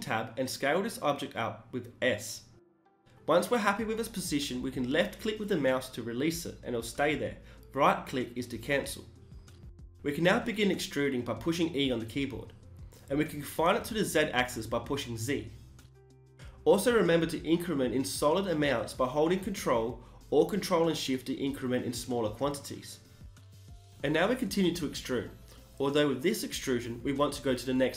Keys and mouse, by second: 9.8 e, 11.9 g, 15.5 a, 15.7 a, 16.5 ctrl+n, 23.3 click, 23.7 z, 24.2 e, 24.3 click, 24.6 g, 24.9 click.